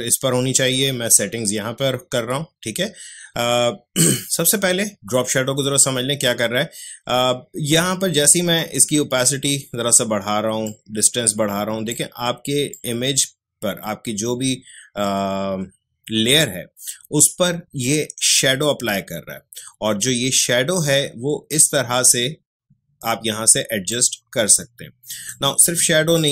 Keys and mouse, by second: 8.5-18.7 drag, 23.9-26.1 drag.